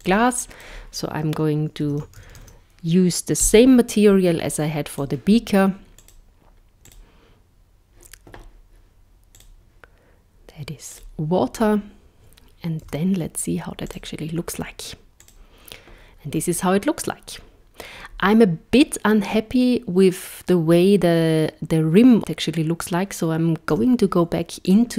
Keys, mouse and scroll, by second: 0.1 click, 5.0 click, 6.1 click, 6.9 click, 9.4 click, 12.9 z, 15.2 click, 23.7 z.